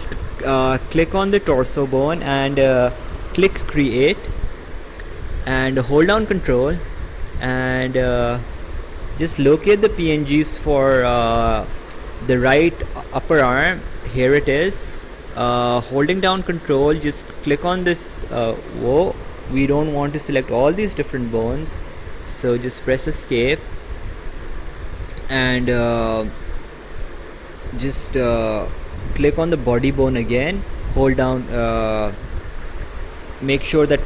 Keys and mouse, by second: 3.2 click, 17.5 ctrl+click, 22.8 Escape, 29.2 click.